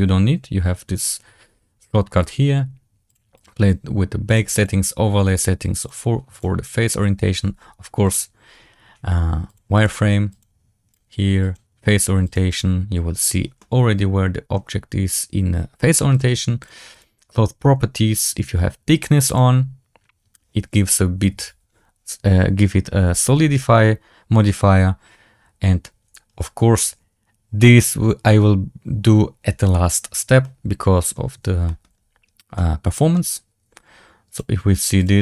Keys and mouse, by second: 4.2 click, 5.8-8.1 drag, 9.7 click, 10.9-11.4 drag, 12.2 click, 12.4 click, 13.5-13.9 middle drag, 13.9 click, 13.9 right click, 16.6-30.3 drag, 30.3-31.0 middle drag, 31.5 shift+middle drag, 32.5-33.0 middle drag, 34.2-35.2 drag.